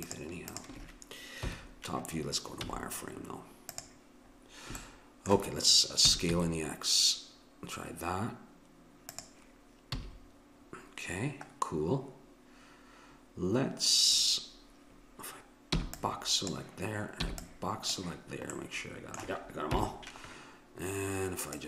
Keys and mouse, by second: 1.4 KP_7, 2.6 z, 6.2 s, 9.9 a, 15.8 b, 17.2 b, 19.7 KP_7, 21.5 click.